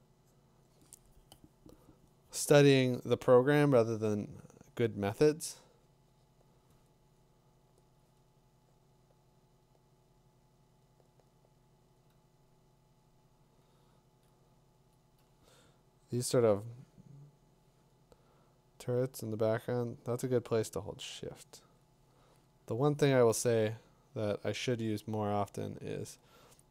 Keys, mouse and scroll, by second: 8.0 click, 13.2 click, 13.8 click, 17.7-18.9 drag, 19.0-25.3 drag, 26.1-26.7 drag, 26.1 typing.